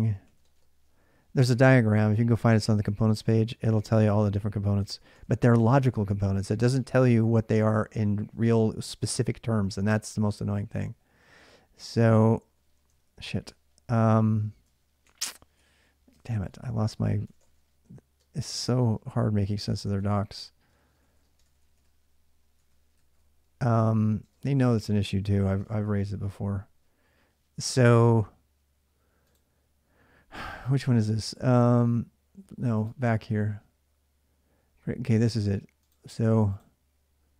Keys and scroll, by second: 0.0-7.0 typing, 8.9 typing, 12.5-24.1 typing, 25.2-26.3 typing.